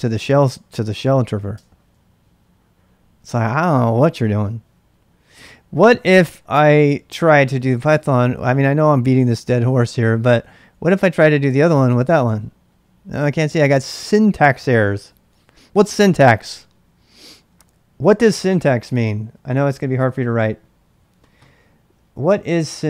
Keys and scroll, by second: 1.5 Return, 7.2-12.1 typing, 12.3 Return.